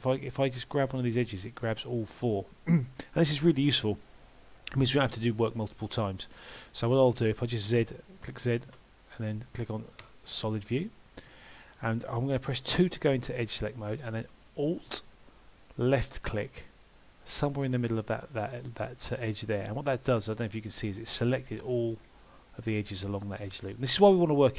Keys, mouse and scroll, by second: 0.6 g, 2.2 middle click, 10.9 middle click, 11.8-12.8 scroll up 1, 12.8 2, 16.0 alt+click, 19.7 middle click, 22.0-22.7 scroll up 2, 23.0-23.4 scroll up 1, 23.6-24.2 scroll down 2, 24.0 middle click.